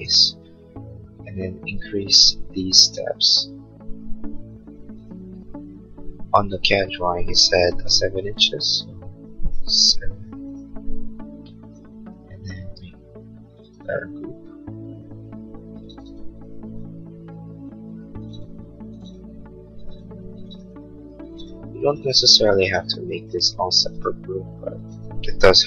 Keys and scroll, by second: 0.2 p, 7.7 p, 10.6 Return, 12.5 space.